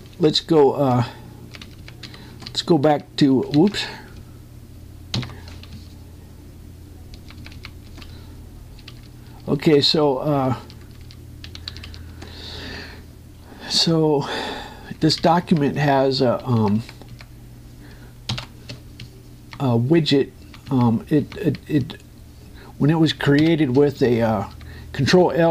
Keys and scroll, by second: 0.3 ctrl+m, 1.5 Down, 3.0 space, 3.1 Up, 4.4 ctrl+Down, 12.4 Up, 17.5 Right, 24.8 Up.